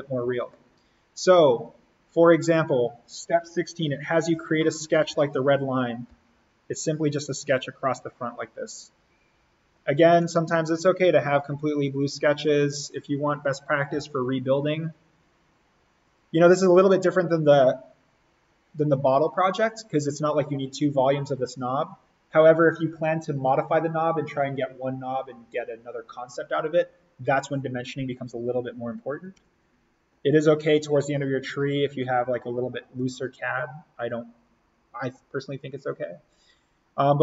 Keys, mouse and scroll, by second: 2.6 click, 4.5 alt+s, 4.9 alt+n, 6.0 l, 6.9 click, 9.7 click, 10.1 Escape, 11.7 click, 13.9 d, 14.7 click, 29.0 Escape, 30.5-32.1 scroll up 1.